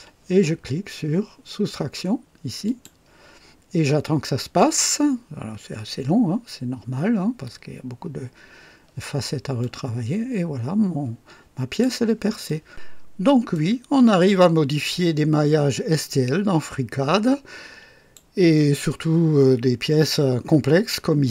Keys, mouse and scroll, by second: 2.6 click, 9.5-11.9 drag, 12.4 click, 13.4-18.3 drag, 18.8-21.3 drag.